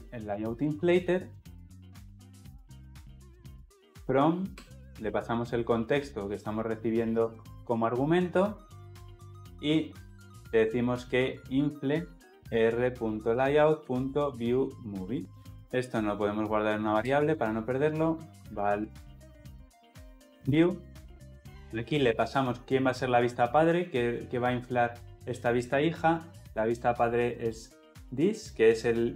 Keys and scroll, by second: 2.3 Return, 11.8 Return, 21.2 Escape, 26.4 Return.